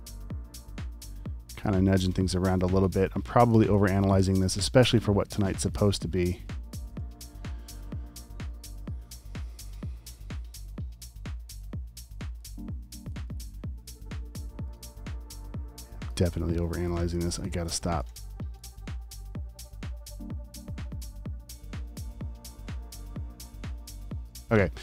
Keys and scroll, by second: 4.0 space, 4.4 v, 6.7 space, 7.0 v, 11.6 super+z, 12.5 v, 16.6 space, 17.1 alt+super+space, 17.7-18.9 typing, 20.4 typing, 24.0-24.3 typing.